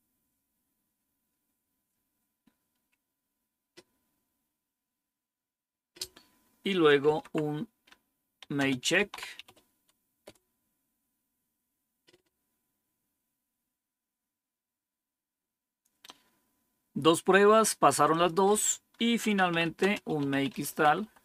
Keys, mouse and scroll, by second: 6.7-9.9 typing, 10.2 Return, 13.1 scroll down 1, 13.8 scroll down 1, 18.0 click, 18.9-21.2 typing.